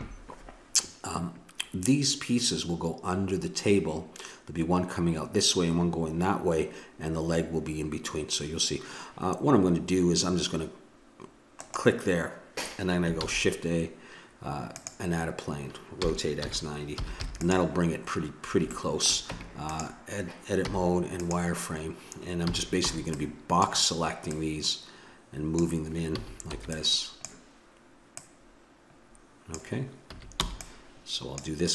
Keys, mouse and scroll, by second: 11.5-13.3 right drag, 13.2 shift+a, 16.0 r, 18.0 middle click, 19.3 Tab, 20.7 z, 22.5 a, 22.9 b, 24.3-25.9 drag, 26.1 a, 26.5 b, 28.1-30.0 drag, 30.1 a, 30.4 b.